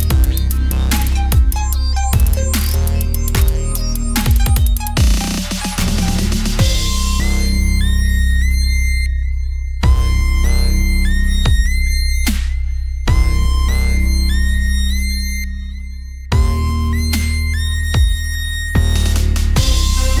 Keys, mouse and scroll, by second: 0.1 click, 0.7 n, 1.2 click, 1.9 n, 2.7-4.7 middle drag, 4.8 z, 5.1 z, 6.4 click, 7.2 shift+d, 7.5 click, 8.2 click, 8.4 Tab, 9.6 alt+c, 10.6 Tab, 10.8 r, 13.9-15.3 middle drag, 15.3 Tab, 16.4 s, 17.3 middle click, 17.8 r, 18.7 click, 19.7 click.